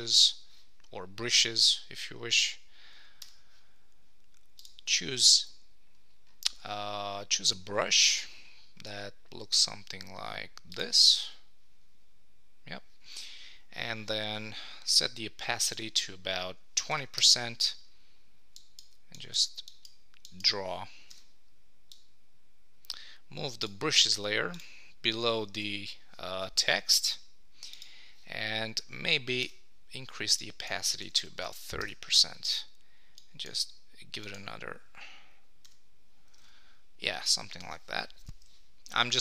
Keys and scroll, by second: 17.2 Return, 25.5 super+s, 31.8 Return.